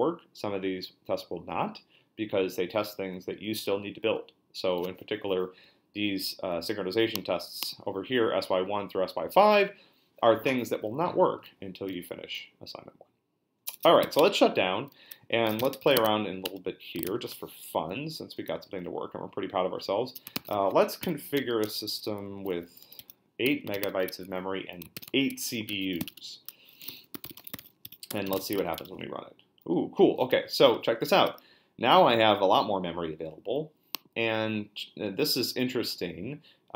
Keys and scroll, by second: 13.6 BackSpace, 14.0 q, 14.2 Return, 15.2-17.0 typing, 16.4 Return, 17.8 Up, 18.0 Up, 19.1 Down, 19.6 Up, 20.3 shift+a, 20.5 BackSpace, 21.0 8, 21.4 Left, 22.1 Left, 22.1-28.9 typing, 25.3 Escape.